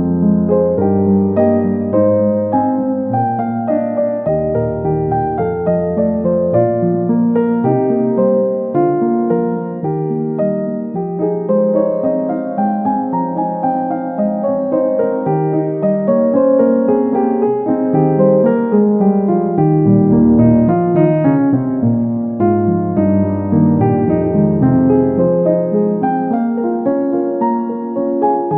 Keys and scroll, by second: 2.1 Right, 2.4 Left, 3.4 Right, 6.3 Right, 7.6 Left, 8.8 Up, 8.9 Left, 9.0 Up, 9.4 Left, 10.0 Down.